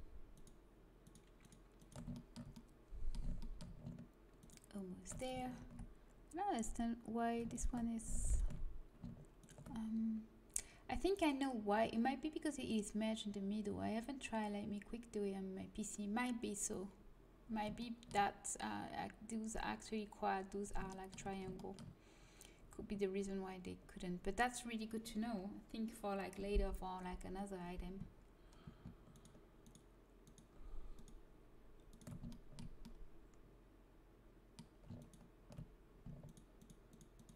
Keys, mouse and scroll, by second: 2.2-3.6 drag, 2.2-5.1 middle drag, 4.4-6.2 right drag, 5.6 ctrl+z, 7.5 right click, 8.0 click, 8.8-11.2 right drag, 16.9-20.3 middle drag, 20.9-28.3 middle drag, 29.1-33.8 right drag, 32.3-33.8 drag, 33.8 middle click, 35.0-37.3 right drag.